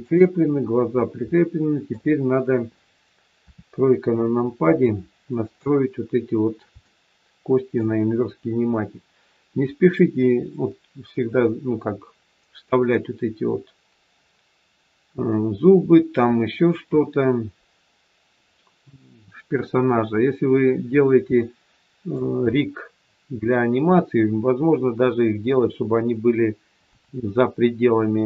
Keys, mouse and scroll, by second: 0.9 scroll down 1, 1.2 shift+middle click, 3.4 KP_3, 4.2 scroll up 1, 4.8 shift+middle click, 21.2 shift+middle click.